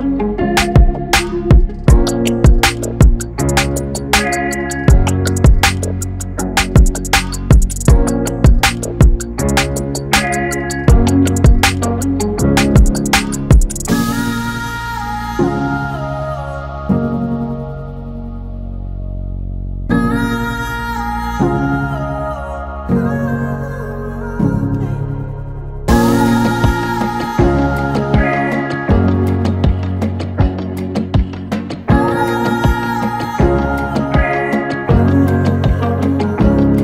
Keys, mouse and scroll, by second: 1.6 click, 8.8 click, 16.5 click, 23.7 click, 23.7-32.1 drag, 35.8 click, 36.1 shift+Tab.